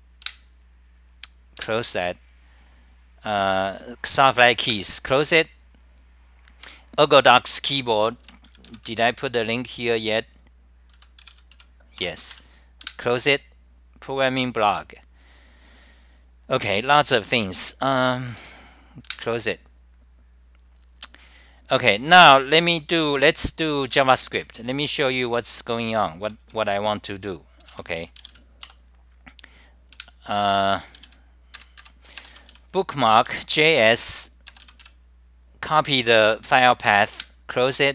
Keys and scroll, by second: 28.8 Return, 30.0 super+w, 30.6 g, 31.0 super+r, 31.7 ctrl+g, 31.9 ctrl+g, 32.5 Delete, 34.0 Return, 37.2 super+w.